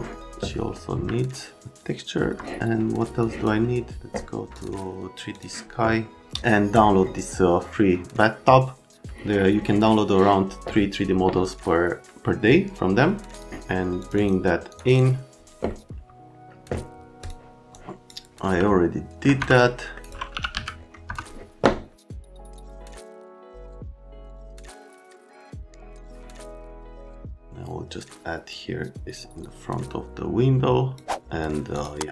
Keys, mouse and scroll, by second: 1.1 alt+middle click, 4.5 click, 5.3 click, 14.0 middle click, 14.1 middle click, 14.7 middle click, 14.8 middle click, 17.2 click, 17.7 click, 18.6 alt+middle click, 19.4 F3, 19.6 right click, 20.0 click, 20.1-21.0 typing, 21.9 click, 22.3 click, 22.4 middle click, 22.6 click, 22.9 alt+middle click, 23.0 alt+middle click, 23.2 alt+middle click, 23.9 alt+q, 24.4 F3, 24.9 middle click, 25.8 alt+middle click, 26.0 F3, 26.1 middle click, 26.6 Escape, 26.7 click, 27.2 alt+middle click, 27.3 right click, 27.5 click, 28.5 click, 31.8 click.